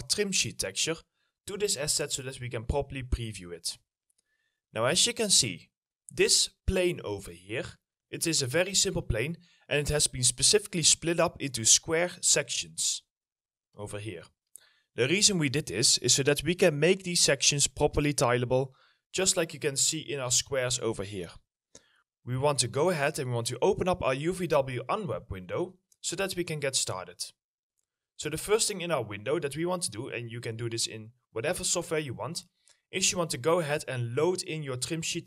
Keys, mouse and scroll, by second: 1.1 middle click, 3.5 scroll up 1, 5.8 middle click, 6.1 scroll down 1, 6.4 alt+middle click, 6.9 w, 8.8 ctrl+z, 9.1 middle click, 9.8-10.4 alt+scroll up 1, 10.4 scroll up 1, 12.5 middle click, 34.4 middle click.